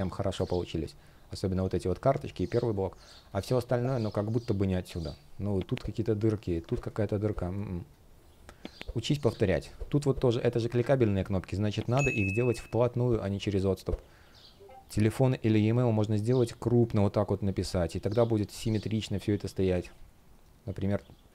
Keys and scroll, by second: 2.4 space, 6.4 super+z, 7.0 space, 12.8 super+z.